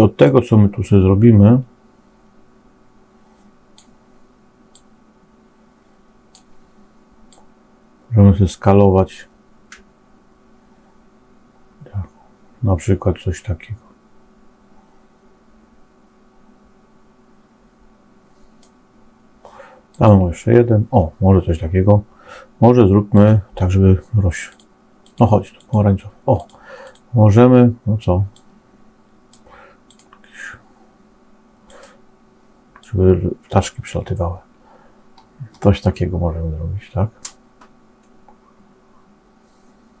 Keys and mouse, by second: 0.2-3.8 drag, 4.8-6.2 drag, 7.3-18.6 drag, 23.2 click, 24.4 click, 25.0 click, 25.5 click, 26.3 click, 35.8-40.0 middle drag.